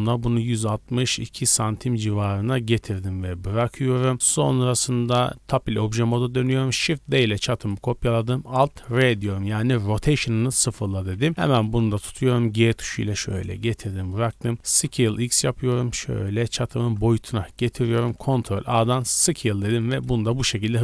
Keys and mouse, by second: 5.0 Tab, 5.9 middle click, 6.9 shift+d, 7.7 middle click, 8.9 alt+r, 11.0 a, 11.2 a, 12.1 g, 12.7-17.1 ctrl+middle drag, 14.6 s, 17.1 drag, 17.6 drag, 17.8-20.8 ctrl+middle drag, 18.2 ctrl+a.